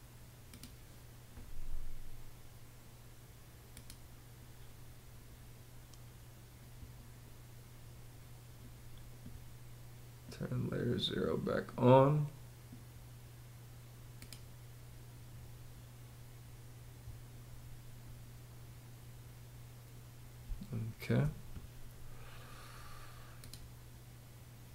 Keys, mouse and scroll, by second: 20.0 space.